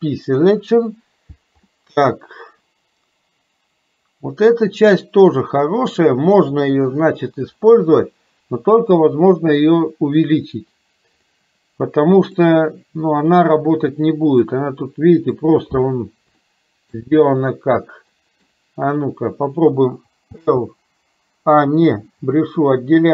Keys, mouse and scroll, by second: 1.9-5.9 middle drag, 11.4 click, 11.4-12.4 middle drag, 14.6 middle click, 16.5 shift+middle click, 18.2 middle click, 20.4 l, 22.7 middle click.